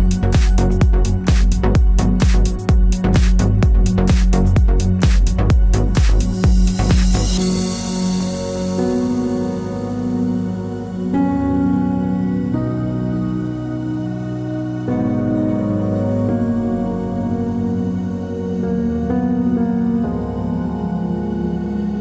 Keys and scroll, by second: 2.5-4.9 typing, 11.9-14.1 typing.